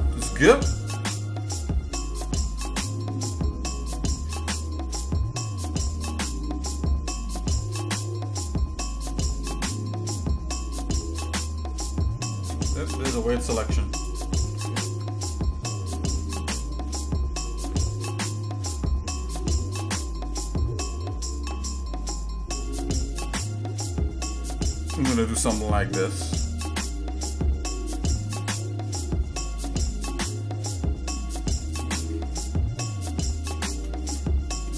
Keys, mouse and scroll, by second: 0.3 ctrl+b, 13.0 shift+middle click, 13.9 shift+click, 14.4 shift+middle click, 15.0 shift+middle click, 15.6 shift+middle click, 16.1 shift+middle click, 18.4 ctrl+b, 32.1-33.7 shift+middle drag.